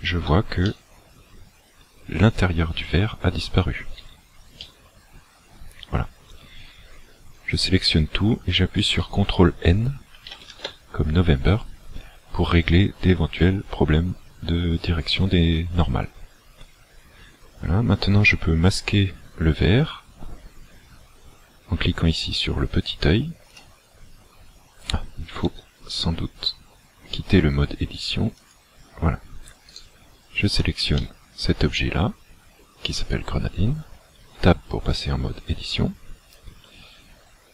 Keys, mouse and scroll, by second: 0.7 middle click, 4.1 a, 4.6 middle click, 10.1 ctrl+n, 23.5 click, 25.5 Tab, 28.4 click, 29.7 right click, 31.1 middle click, 34.2 Tab, 37.1-37.5 scroll up 2.